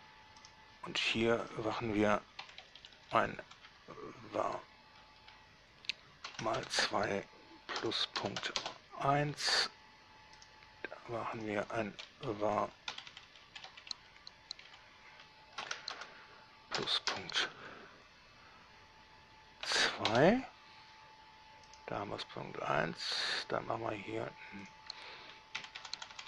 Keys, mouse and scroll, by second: 0.7 right click, 1.7 click, 2.7 Right, 2.9 Left, 3.0 Left, 3.2 Left, 3.3 Left, 3.7 Left, 6.9 shift+2, 8.4 ., 8.6 1, 8.9 Return, 10.7 right click, 11.6 click, 12.5 Left, 12.7 Left, 12.9 Left, 13.2 Right, 13.3 Right, 13.5 Right, 13.7 Right, 13.9 Right, 16.2 shift+2, 17.3 ., 19.9 2, 20.3 Return, 21.9 right click, 23.6 right drag, 24.9 click, 25.9 Right, 26.0 Left, 26.2 Left.